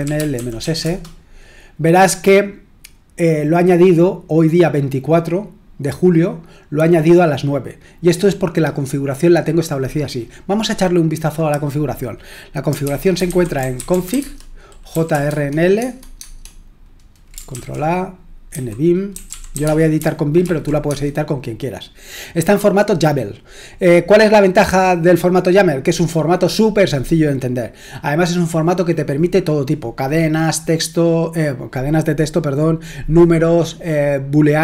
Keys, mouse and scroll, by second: 0.0-1.1 typing, 12.6-15.4 typing, 15.8 Tab, 16.2 Tab, 17.5 ctrl+a, 18.5-20.9 typing.